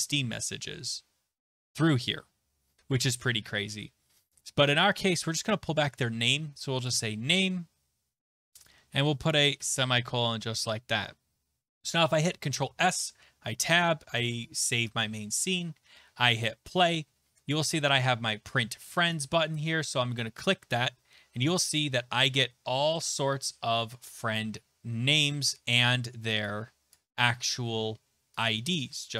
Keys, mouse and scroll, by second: 3.6-6.9 scroll, 7.0 click, 8.6 click, 9.6 ;, 11.9 ctrl+s, 12.7 alt+Tab, 14.1 ctrl+s, 16.4 click, 19.6 click, 20.4 click, 21.8 click, 22.2-23.5 scroll, 23.5-26.8 scroll, 26.9 click, 28.7 click.